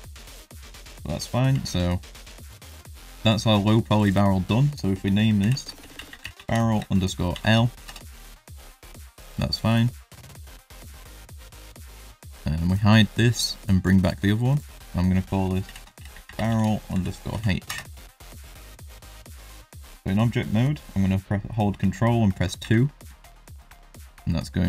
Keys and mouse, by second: 0.0 click, 1.0 middle drag, 1.5 shift+middle drag, 1.9 middle click, 3.9 click, 4.0-8.6 drag, 6.0 r, 9.6 click, 11.4 click, 12.6 click, 13.5 click, 14.0 click, 14.6-18.4 drag, 16.2 r, 19.6 click, 22.8 ctrl+2, 24.1-24.5 middle drag.